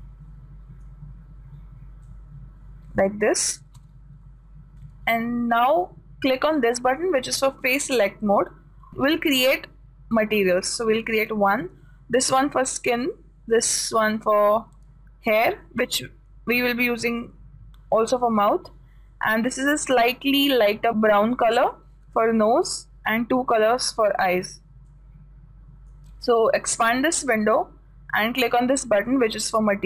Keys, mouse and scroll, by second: 2.7-4.4 drag, 4.2 a, 7.4-8.9 drag, 25.4-27.1 drag, 29.2-29.8 drag.